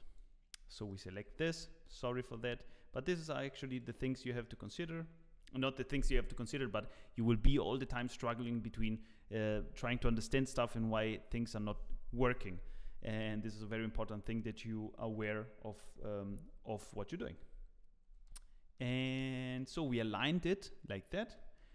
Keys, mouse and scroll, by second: 0.9 alt+v, 0.9 click, 19.3 scroll up 3, 19.5 shift+middle click.